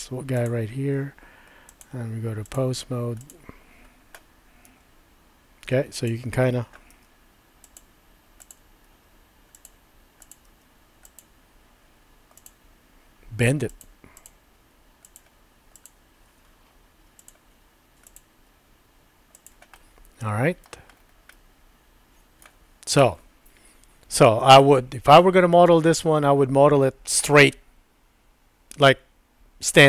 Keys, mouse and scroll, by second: 1.8 click, 3.2 click, 4.7 r, 6.9 g, 8.5 click, 8.8 g, 10.2 click, 10.5 g, 12.3 click, 13.7 click, 14.6 g, 15.8 click, 16.3 g, 18.3 g, 19.7 middle click, 21.4-22.5 middle drag.